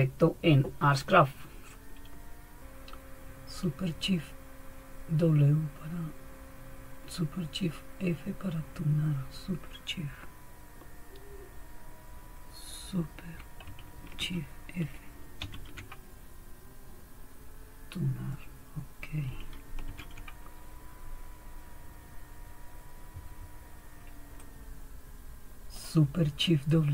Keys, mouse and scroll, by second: 15.4 super+f, 19.9 super+1, 24.4-25.8 drag.